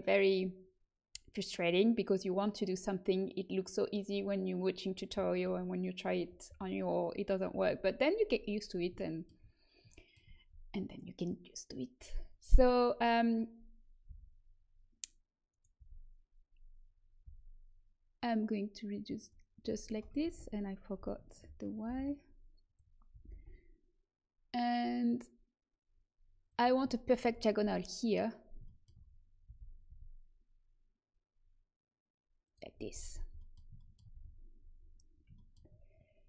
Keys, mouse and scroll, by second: 8.9-13.2 middle drag, 14.0 s, 15.7 z, 17.2 s, 20.2 ctrl+z, 20.9 s, 23.0 g, 26.8-29.4 middle drag, 29.4 g, 34.1 z.